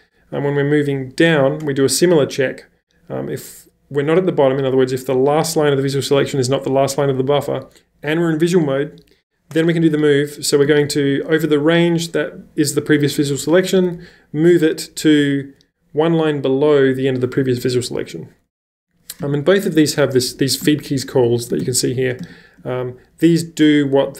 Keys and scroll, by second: 10.7 shift+b, 13.7 w, 13.9 w, 19.2 j, 20.7-22.2 typing.